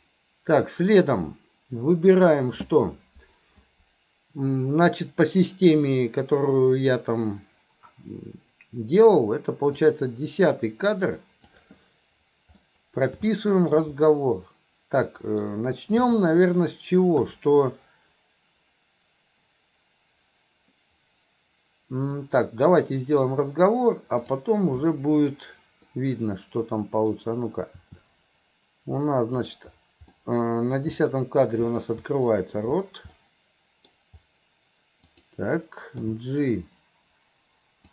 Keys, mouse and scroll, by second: 0.0-2.4 drag, 9.9-11.6 drag, 12.7-13.1 middle drag, 13.4-13.8 middle drag, 14.1-15.5 middle drag, 22.2-23.3 middle drag, 24.2 click, 26.0-27.1 middle drag, 27.8 r, 30.2-30.8 middle drag, 32.3 middle click, 33.2-33.9 middle drag, 35.1 click, 36.0 g.